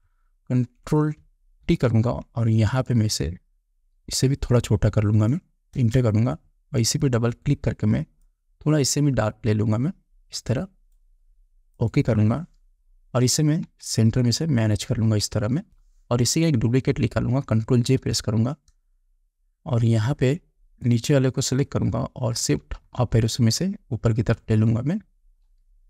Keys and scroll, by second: 2.1 ctrl+t, 6.2 Return, 14.1 shift+Up, 15.5 Up, 15.7 Down, 18.5 ctrl+j, 22.9 shift+Up.